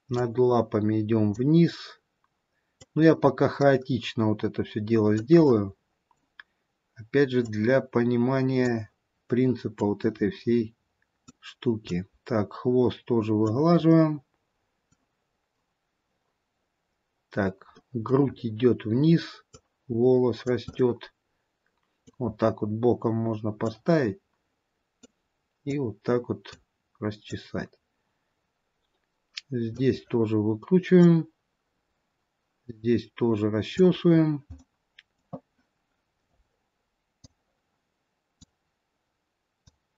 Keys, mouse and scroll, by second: 0.5 click, 3.0 click, 5.7 middle click, 7.6 click, 10.0 click, 14.1 middle click, 15.7-16.9 scroll up 1, 17.8 middle click, 18.5 scroll up 4, 19.8 click, 20.8 scroll up 1, 21.0 middle click, 22.6-23.9 scroll down 3, 23.9 click, 26.0 click, 31.2 click, 34.7 middle click, 34.7-36.5 scroll down 4, 36.5-37.1 scroll up 1, 37.5 click, 37.5-38.9 scroll up 1, 39.9 click.